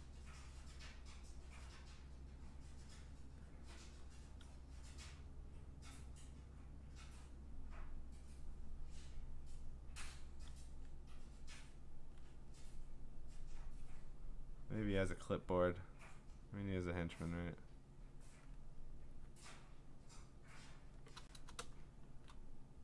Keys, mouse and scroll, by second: 0.0 click, 0.8 click, 1.7 click, 2.5 click, 2.9 click, 3.3 click, 4.4 click, 5.3 click, 5.7 click, 6.0 click, 6.9 click, 8.2 click, 10.7 click, 13.6 click, 13.8 click, 14.2 click, 14.9 click, 16.8 click, 18.2 click, 19.4 click, 20.1 click, 20.6 click, 22.1 click.